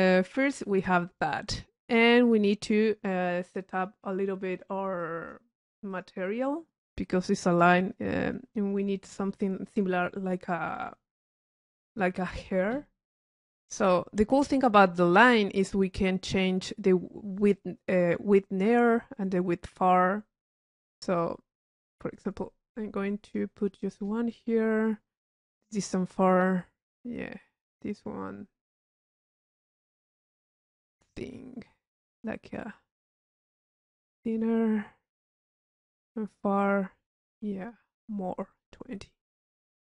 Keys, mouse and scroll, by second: 2.1-2.7 drag, 8.1 click, 14.8-15.1 drag, 20.5-23.8 drag, 25.2 click, 28.3-32.7 drag, 32.9 click, 33.6 click, 34.3 click, 36.1-38.6 drag, 39.4 click.